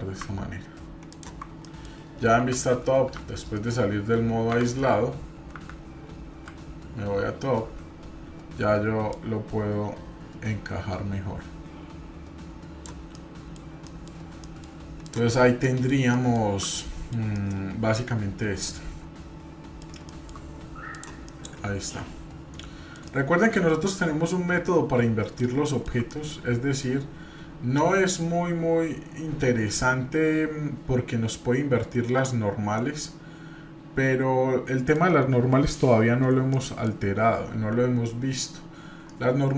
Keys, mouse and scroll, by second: 1.6 middle click, 2.3 KP_7, 3.1 KP_Divide, 6.3 KP_7, 9.1-12.8 drag, 13.1-13.6 middle drag, 13.8 middle click, 14.4 middle drag, 15.0 drag, 15.4 scroll up 2, 15.6 middle drag, 15.9 scroll down 1, 16.1-17.1 shift+middle drag, 17.3-19.9 middle drag, 20.1 shift+middle drag, 20.9 click, 21.2-22.9 middle drag, 23.1-25.4 middle drag, 25.7 shift+middle drag, 26.1 middle click, 27.8-35.1 middle drag, 36.5 middle click.